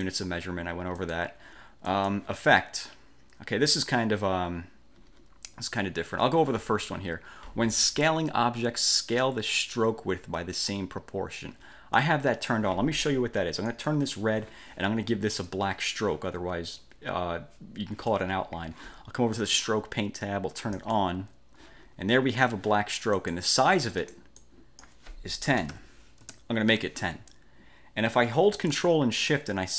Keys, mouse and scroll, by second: 0.2 click, 1.1 click, 2.0 click, 12.1-12.8 drag, 13.8 click, 19.6 click, 20.9 click, 23.3 click, 24.1 click, 25.5-26.4 typing.